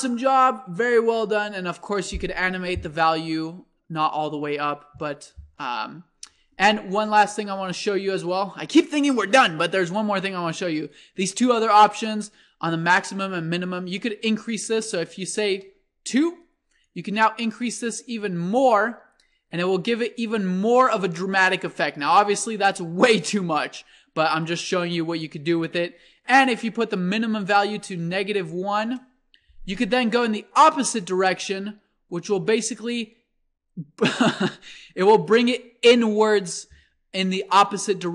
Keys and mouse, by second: 4.5-5.8 drag, 6.6-8.4 drag, 12.9-14.5 drag, 16.8-18.5 drag, 25.1-26.8 drag, 30.3-32.3 drag, 37.5-38.1 middle drag.